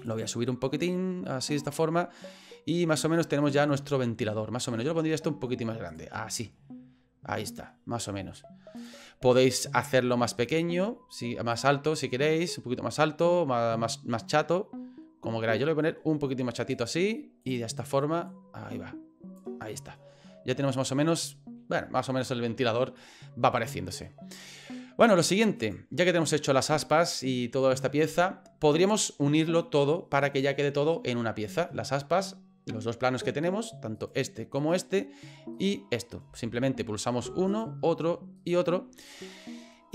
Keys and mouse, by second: 0.0 click, 0.9 click, 2.1-4.2 middle drag, 4.2 click, 4.8 s, 6.1-7.6 drag, 8.2 s, 9.1 middle click, 9.7 middle click, 10.6 middle click, 12.3-16.7 drag, 18.3-19.4 drag, 19.7 middle click, 20.8 middle click, 21.8-22.8 middle drag, 23.1 middle click, 24.5 middle click, 25.6 right click, 34.0 right click, 34.6 right click, 35.5 right click, 37.5 shift+right click, 38.4 shift+right click.